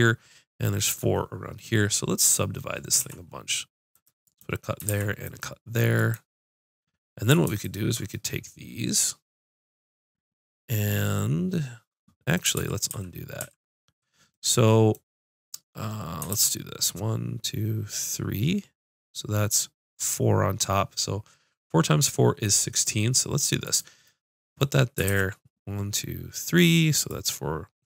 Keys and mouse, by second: 4.1 ctrl+r, 4.9 ctrl+r, 4.9-7.5 drag, 7.6-9.6 drag, 11.0-12.0 middle drag, 12.6 ctrl+z, 12.9 ctrl+z, 13.7 ctrl+z, 16.3 ctrl+r, 23.8 right click, 24.1 middle click, 25.1 ctrl+r.